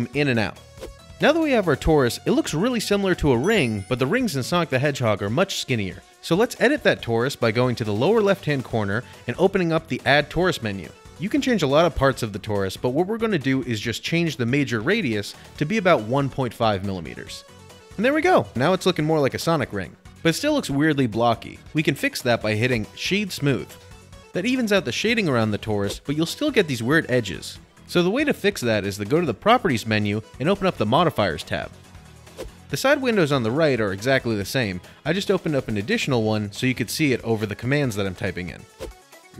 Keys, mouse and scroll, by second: 0.1 middle click, 0.2 middle click, 0.4 middle click, 0.4 middle click, 0.5 middle click, 1.2 middle click, 1.4 middle click, 1.6 middle click, 1.7 middle click, 3.6 shift+middle click, 5.3 middle click, 6.2 scroll, 17.6 Return, 17.6 click, 17.6 typing, 22.5 middle click, 23.2 click, 23.3 right click, 24.0 click, 24.9 middle click, 25.1-25.5 scroll, 25.5-26.1 shift+middle click, 26.3 shift+middle click, 27.9 middle click, 28.5 middle click, 28.6 middle click, 29.1 click, 30.1 click, 32.0 click, 32.6 click, 35.0 click, 36.5 click, 38.9 click.